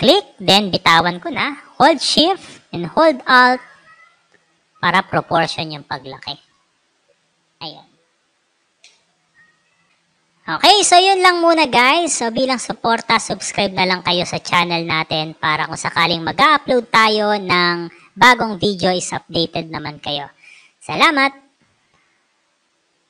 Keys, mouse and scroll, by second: 6.3 click, 6.8 click, 7.2-7.8 alt+scroll up 3, 8.7 space, 8.9 click, 23.0 click.